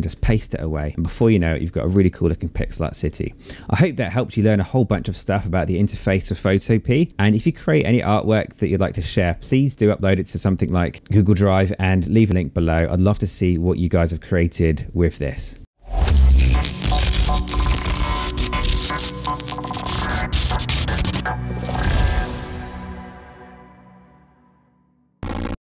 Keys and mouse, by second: 2.1 click.